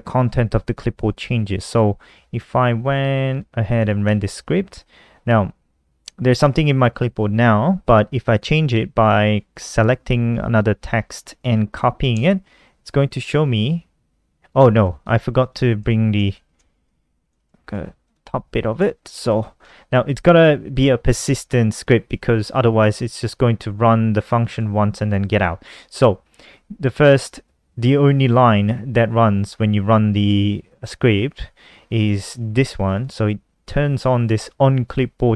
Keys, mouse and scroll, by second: 0.8 click, 3.1 ctrl+s, 3.3 F5, 8.4 click, 11.2 ctrl+c, 14.5 click, 15.5 Down, 15.7 shift+Home, 15.9 shift+Home, 17.2 click, 17.6 Down, 17.8 Return, 18.0 Up, 18.2 Return, 18.3 ctrl+v, 19.4 click, 22.9 click, 24.2 click, 26.5 click, 31.9 click.